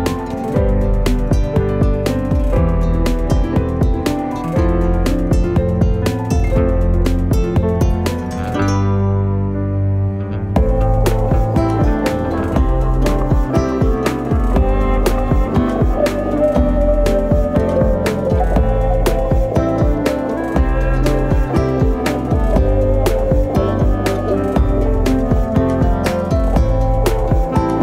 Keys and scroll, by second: 3.9-5.0 typing, 8.7 u, 13.8 ctrl+z, 14.1 ctrl+z, 14.6 ctrl+z, 20.8-21.9 typing, 26.6 0, 26.7 Return.